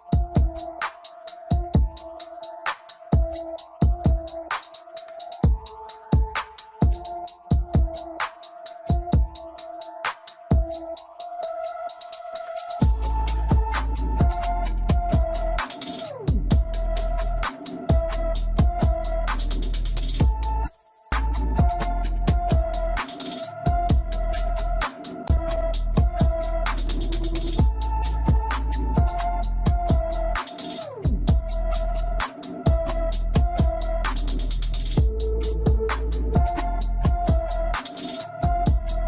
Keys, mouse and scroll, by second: 1.6 middle click, 2.2-2.6 scroll up 2, 2.6 click, 3.2 click, 4.3-5.5 middle drag, 7.7 click, 14.7 click, 15.8 click, 17.4-21.8 drag, 27.0-29.2 middle drag, 29.2-29.9 scroll up 1, 29.9-34.8 shift+middle drag, 38.5-39.0 scroll up 1.